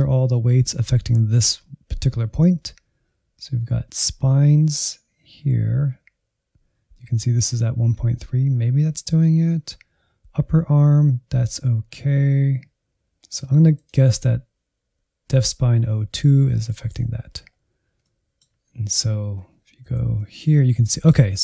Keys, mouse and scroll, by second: 13.7-16.8 drag, 16.8 Tab, 17.4-18.0 scroll up 1, 18.0-19.9 middle drag, 19.9 shift+z, 20.4-21.4 middle drag.